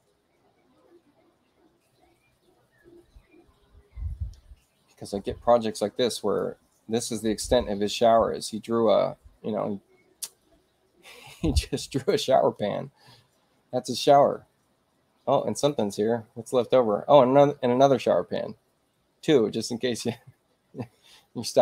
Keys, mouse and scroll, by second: 6.1 click, 11.4 space, 11.9 click, 15.5 click.